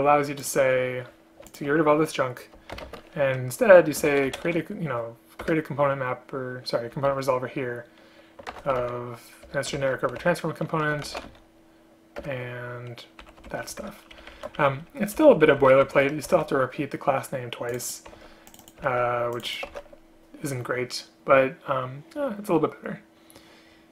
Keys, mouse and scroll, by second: 1.6 shift+click, 3.0 shift+space, 5.5 Return, 9.6 Return, 12.3 Return, 13.3 End, 13.6 shift+Home, 13.9 ctrl+c, 14.2 Down, 14.4 Down, 14.5 Down, 15.3 End, 15.6 shift+Up, 15.7 shift+Up, 15.9 shift+Home, 16.4 ctrl+v, 18.3 ctrl+c, 19.0 ctrl+v, 19.8 ctrl+v.